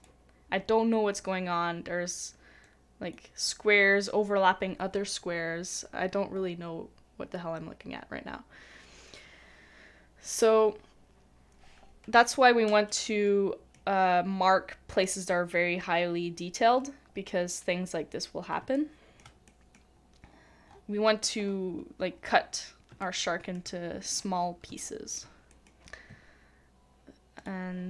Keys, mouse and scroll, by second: 12.8 double click, 18.6 middle click, 18.7 shift+middle click, 19.5 shift+middle click, 20.2 scroll up 1, 20.3-20.6 scroll down 1, 20.6 scroll up 1, 20.7 scroll down 1, 20.9-21.2 scroll up 1, 21.2 scroll down 1, 22.4-22.9 scroll up 1, 22.9 scroll down 1, 23.0 shift+middle click, 23.8 scroll down 1, 23.8 scroll up 1, 24.8 shift+middle click.